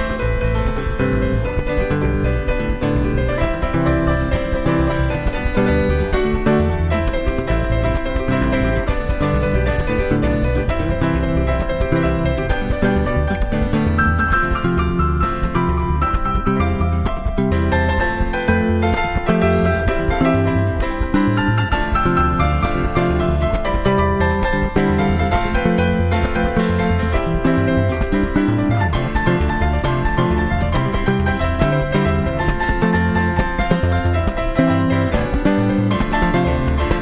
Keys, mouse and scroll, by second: 1.7-4.0 drag, 4.5-7.3 drag, 7.6-9.4 drag, 16.2-19.5 middle drag, 19.5-21.3 drag, 22.5-24.3 drag, 24.4-26.2 drag, 28.7-30.3 middle drag, 30.3-32.2 drag, 32.2-33.3 middle drag, 33.3-35.4 drag.